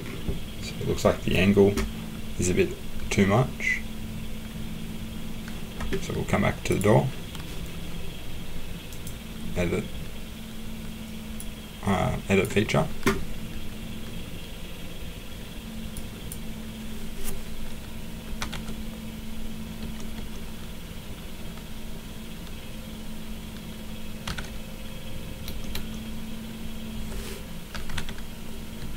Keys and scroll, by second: 18.1-20.1 typing, 24.0-25.7 typing, 27.5-28.8 typing.